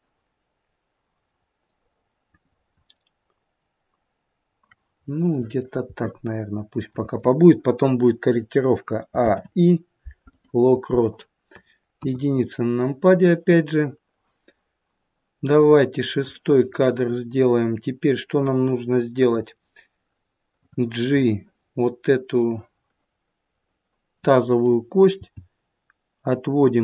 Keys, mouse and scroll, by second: 1.7 middle click, 5.0 middle click, 5.9 middle click, 9.2 a, 9.2 i, 12.0 KP_1, 12.6-13.1 scroll up 1, 15.6 click, 20.5 click, 21.2 middle click, 25.1 g.